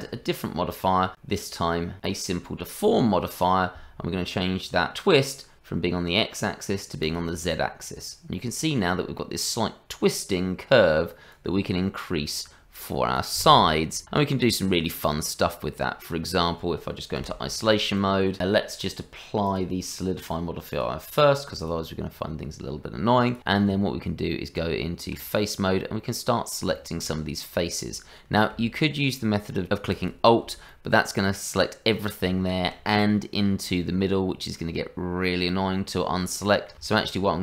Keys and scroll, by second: 17.2 KP_Divide, 23.7 Tab.